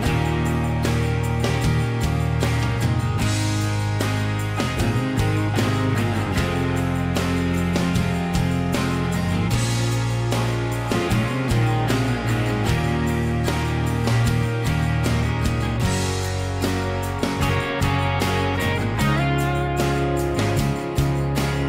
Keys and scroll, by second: 0.1-3.2 typing, 6.0 ctrl+g, 8.4-10.5 typing, 10.7 Return, 12.0-12.8 typing, 16.1 m.